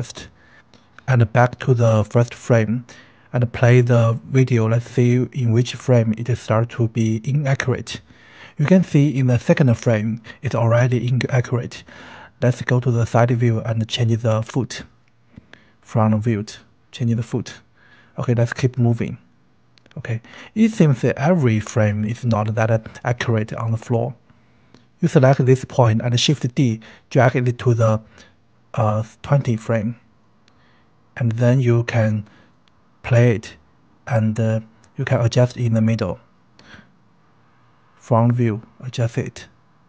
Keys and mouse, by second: 1.6-3.9 drag, 5.4 Left, 7.6 click, 9.9 g, 10.3 click, 10.6 KP_3, 11.1 r, 11.7 click, 11.8 g, 12.6 click, 13.0 r, 13.5 click, 14.1 KP_1, 15.2 r, 16.0 click, 17.6-19.1 drag, 19.1-21.7 right drag, 22.1 right click, 24.7 shift+d, 26.7-29.1 drag, 30.9 KP_3, 31.0 click, 32.1 r, 33.7 g, 34.0 n, 34.2 click, 34.5 r, 35.5 click, 36.1 KP_1, 37.0 r, 39.2 click.